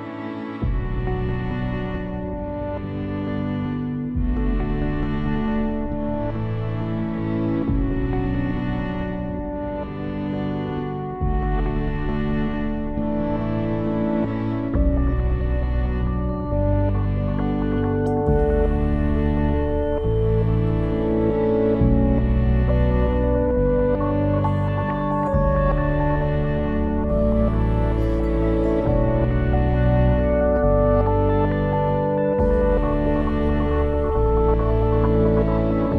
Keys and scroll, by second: 34.4 shift+l, 34.7 e.